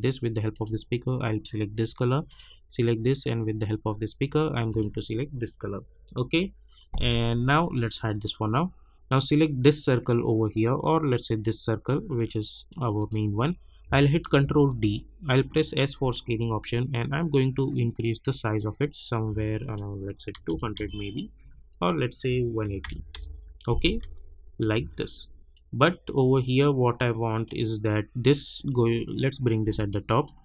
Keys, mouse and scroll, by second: 14.2 ctrl+d, 15.4 s, 16.6-19.6 drag, 20.7 Return, 21.7 click, 23.1 Return, 24.0 space, 25.5-28.4 drag, 28.6-30.4 drag.